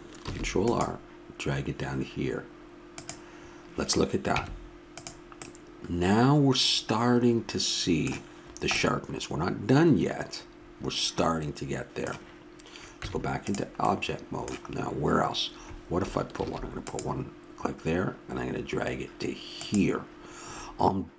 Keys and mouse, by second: 0.2 ctrl+r, 4.3 Tab, 5.4 middle click, 8.4-13.0 middle drag, 13.0 Tab, 16.4 ctrl+r.